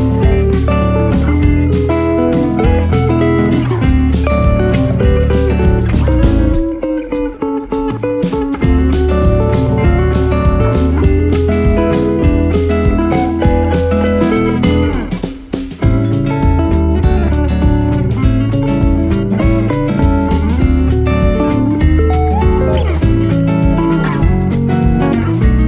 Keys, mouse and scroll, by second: 2.3-2.9 scroll down 1, 2.9 click, 4.1-5.7 drag, 7.8-9.1 scroll down 2, 9.1 click, 11.3 click, 16.3 click, 18.7 click, 19.5 click, 20.7 click, 21.0 click, 22.0-24.5 typing, 22.5 click, 23.9 click, 24.5 click, 25.1 click, 25.4-25.6 scroll down 3.